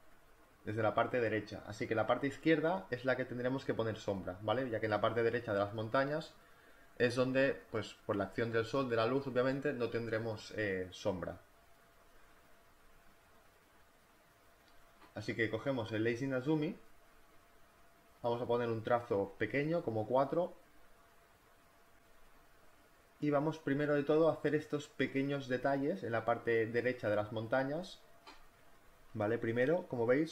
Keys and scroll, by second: 11.9 Delete, 17.7 space, 20.3 4.